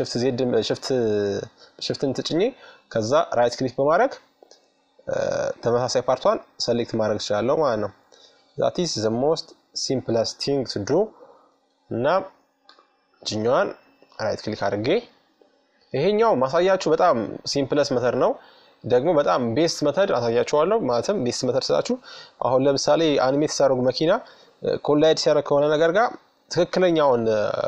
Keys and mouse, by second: 2.0-3.8 middle drag, 4.2 middle click, 8.6-10.4 right drag, 9.5 f, 11.2-12.9 right drag, 12.0 KP_Subtract, 14.2-19.4 middle drag, 19.6 middle click, 24.2-26.0 right drag, 25.2 f, 26.6-27.6 middle drag.